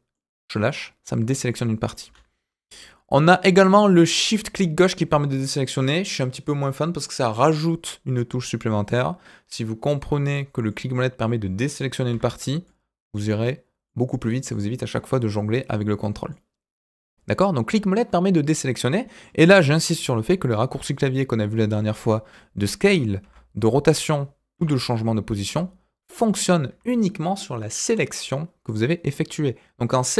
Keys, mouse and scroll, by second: 1.5 middle click, 2.0 b, 10.6-11.7 middle drag, 12.1 b, 13.8 middle click, 16.3-19.3 middle drag, 23.2 r.